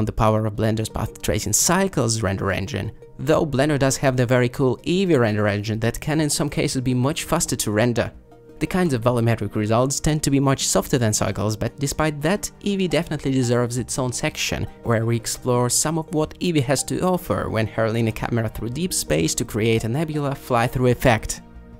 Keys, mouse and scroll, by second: 6.6 shift+Down, 7.3 shift+Left, 8.3 shift+Left, 12.0 space.